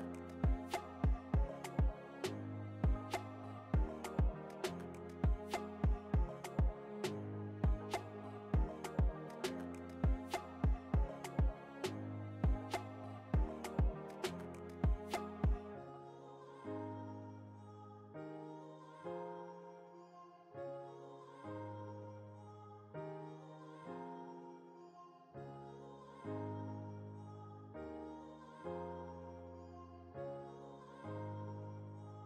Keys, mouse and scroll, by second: 0.1 ctrl+j, 1.3 ctrl+t, 2.1 right click, 3.2-10.1 drag, 10.1 Return, 10.7 click, 11.1 alt+scroll down 1, 11.9 alt+scroll up 1, 14.0 alt+click, 15.4 ctrl+alt+t, 16.2-20.0 alt+drag, 20.0-22.8 alt+drag, 24.2 alt+click, 25.1 alt+Return, 27.2 alt+click, 28.9 ctrl+alt+t, 30.4 alt+click, 31.6 ctrl+alt+t.